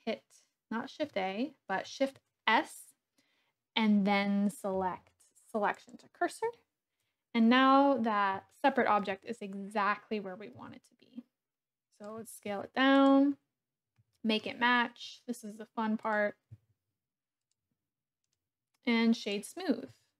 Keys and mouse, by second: 2.1 shift+s, 8.5-9.0 shift+drag, 10.5 s, 12.0 click, 12.2 g, 12.4 z, 13.0 click, 14.1 shift+middle click, 15.0 s, 16.1 click, 16.4 g, 16.7 z, 17.4 click, 18.2-19.3 drag, 19.9 s.